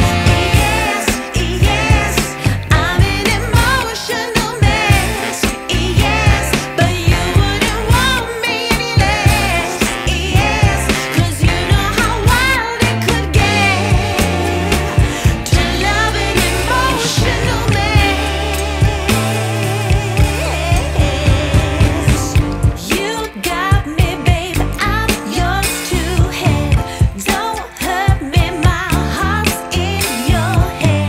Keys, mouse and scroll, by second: 0.4 click, 1.2 right click, 1.5 click, 1.7 right click, 2.3 click, 3.3 right click, 3.5-4.0 scroll down 1, 4.0 right click, 4.6 scroll up 1, 5.1 ctrl+shift+click, 5.7 scroll up 1, 6.0 right click, 7.4 ctrl+shift+click, 8.6 scroll down 1, 8.9 right click, 9.4 scroll up 1, 10.4 ctrl+shift+click, 13.8 click, 14.3 right click, 14.7 scroll down 1, 14.9 scroll up 1, 15.1 right click, 15.6 scroll down 1, 15.8 scroll up 1, 16.1-20.0 right drag, 20.0 scroll down 1, 20.2 scroll up 1, 20.4 right click, 21.2 click, 22.3 right click, 22.9 scroll down 1, 23.0-23.4 scroll up 1, 23.4-25.4 right drag, 25.8 click, 26.9-29.6 right drag, 30.3 click, 30.8 right click.